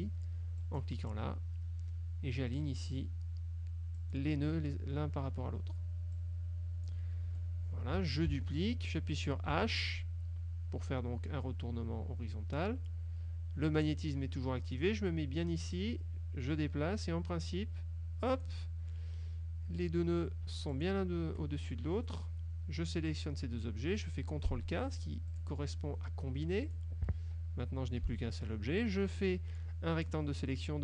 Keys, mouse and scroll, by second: 0.7 click, 4.1 click, 6.2 click, 7.4 F1, 8.4 ctrl+d, 9.6 h, 15.9-18.8 drag, 20.8 shift+click, 25.4 click, 26.8 click, 28.0 F2, 28.9-30.4 drag.